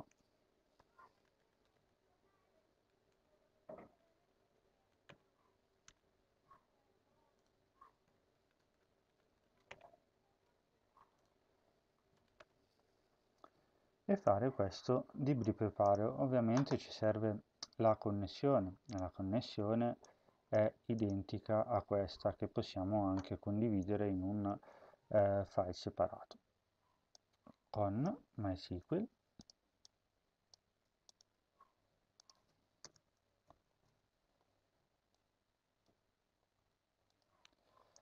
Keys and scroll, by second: 0.4-2.1 typing, 3.0 Return, 3.8-4.6 typing, 5.0 Return, 5.8 BackSpace, 7.4 Tab, 8.2 typing, 9.0 Up, 9.4 End, 9.6 Return, 9.8 ctrl+v, 10.8 Home, 11.2 Caps_Lock, 12.2 Tab, 24.4 ctrl+s, 30.4 ctrl+c, 32.6 Return, 33.2 Home, 33.6 ctrl+v, 35.6 Tab, 36.4 Tab.